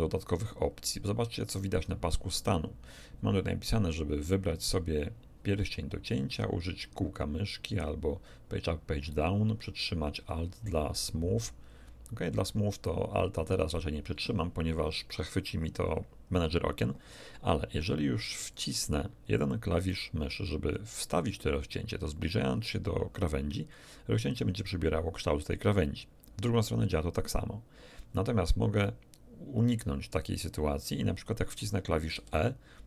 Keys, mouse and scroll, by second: 18.5 click, 32.1 e.